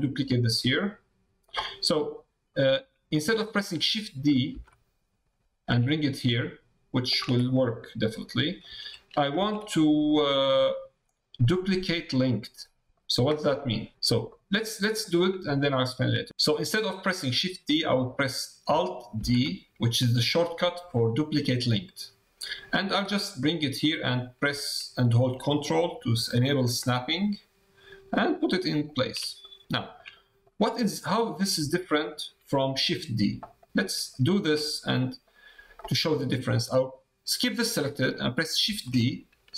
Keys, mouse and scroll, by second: 0.5 middle click, 2.5 middle click, 7.4-8.6 middle drag, 9.8 middle click, 10.4 click, 12.3 middle click, 13.5 click, 14.3 click, 15.5 shift+click, 16.3 x, 29.4 click, 29.7 shift+middle click, 30.1 middle click, 31.2 middle click, 31.6 shift+middle click, 33.6 middle click, 34.1 shift+middle click, 34.6 click, 34.9 click.